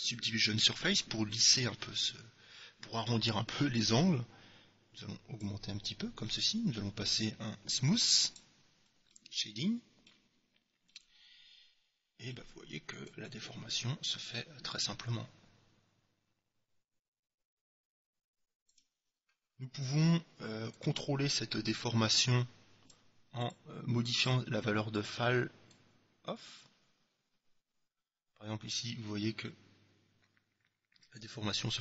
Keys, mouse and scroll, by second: 4.1-5.8 drag, 6.4-8.2 middle drag, 8.4-10.0 drag, 9.2-13.0 middle drag, 13.3-15.0 drag, 20.9-22.6 drag, 23.5-25.4 drag, 25.8-27.6 drag.